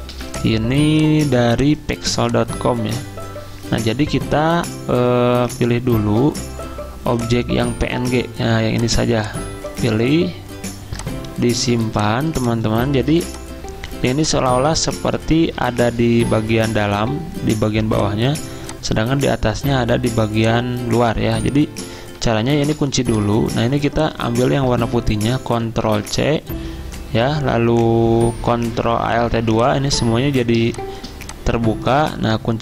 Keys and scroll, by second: 0.1 v, 11.8 z, 13.1 v, 22.6 ctrl+2, 24.5 ctrl+z, 25.9 ctrl+c, 28.7 ctrl+alt+2.